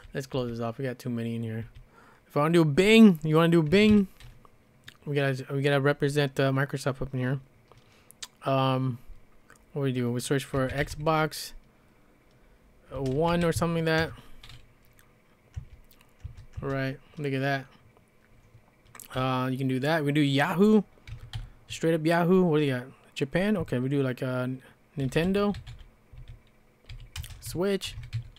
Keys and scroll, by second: 0.0-0.4 typing, 1.6 typing, 3.5-4.2 typing, 10.3-11.4 typing, 12.9-13.9 typing, 14.0 Return, 15.6-17.1 typing, 20.9-21.8 typing, 24.8-28.3 typing.